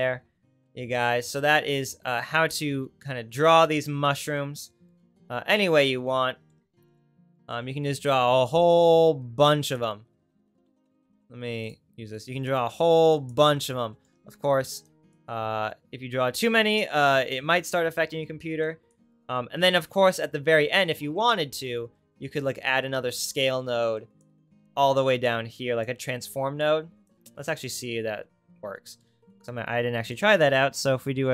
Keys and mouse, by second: 5.0 middle click, 5.5 middle click, 8.6-12.5 drag, 10.8 Tab, 11.3 Tab, 14.5 ctrl+z, 19.8 ctrl+z, 23.1-31.3 drag, 29.1 shift+a.